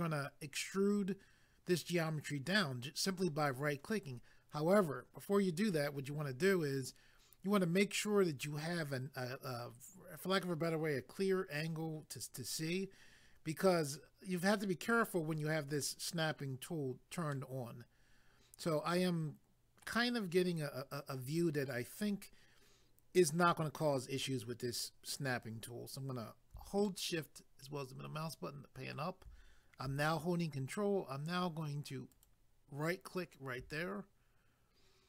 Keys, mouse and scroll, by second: 17.3 middle click, 26.9 shift+middle click, 32.1 ctrl+right click.